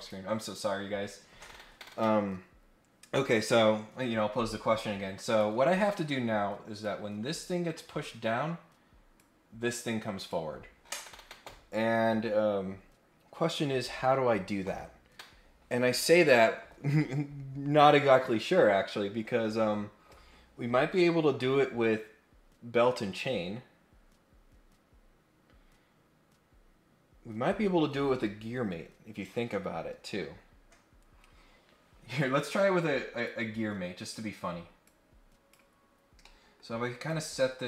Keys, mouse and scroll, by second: 5.3 click, 6.8-8.1 drag, 9.1-10.3 drag, 32.4 click, 33.2 click, 34.8 click, 36.2 middle click, 37.0 click.